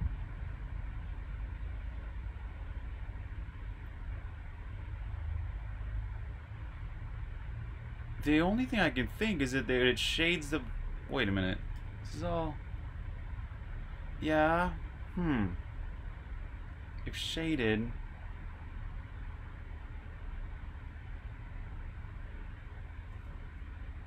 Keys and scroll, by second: 5.2-6.0 typing, 9.8 typing, 11.7 super+b, 11.7-12.8 typing, 13.9-14.6 typing, 16.4-18.4 typing, 20.3 typing, 23.2-24.0 typing.